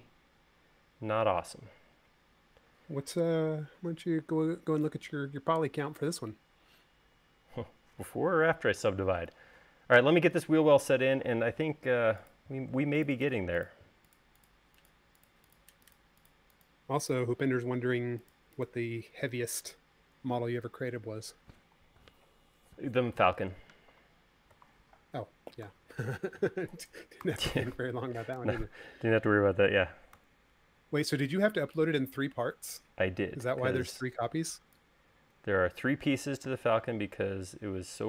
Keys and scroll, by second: 26.2 super+c, 27.8 v, 37.1 e.